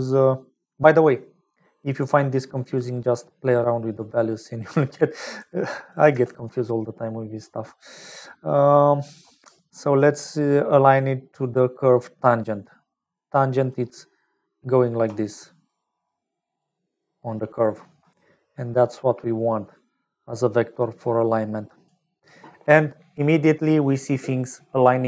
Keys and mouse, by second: 2.1 click, 3.8 click, 4.1 click, 5.8 click, 6.2 shift+a, 15.0-18.0 typing, 15.2 click, 16.0 click, 17.3 click, 21.0 click.